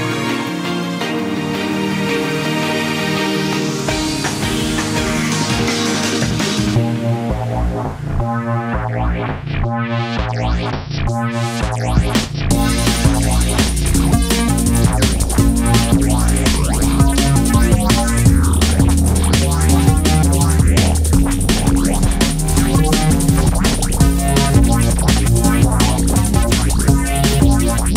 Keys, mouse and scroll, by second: 0.2 i, 3.5-5.1 scroll up 1, 5.1 s, 7.1 click, 7.8 1, 8.8 click, 9.9 s, 12.8 s, 14.3 Tab, 15.0 click, 15.2 scroll down 1, 15.4 middle click, 15.9 Tab, 16.1 scroll up 1, 16.8-17.3 scroll up 2, 17.3 shift+click, 17.9 shift+click, 18.2 middle click, 19.0 shift+click, 19.2 scroll down 2, 19.4-19.9 middle drag, 19.9-20.3 scroll up 1, 20.3 shift+click, 20.5 scroll down 2, 20.7 middle click, 21.0-22.2 right drag, 22.2 middle click, 22.8 scroll up 1, 23.0 Tab, 23.3-24.2 middle drag, 24.2 click, 24.5-25.0 middle drag, 25.0 scroll up 1, 25.1 Tab, 25.5-26.6 middle drag, 26.6 KP_3, 27.0-27.3 scroll up 1, 27.3 scroll down 1, 27.6 s.